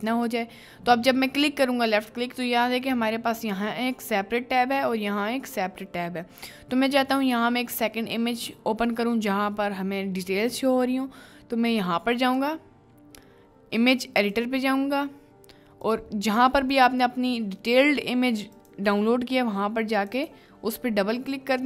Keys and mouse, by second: 2.8-3.4 middle drag, 3.6-4.6 middle drag, 5.1-5.9 middle drag, 6.3 middle click, 12.2-14.7 drag, 15.8 click, 21.5 middle click.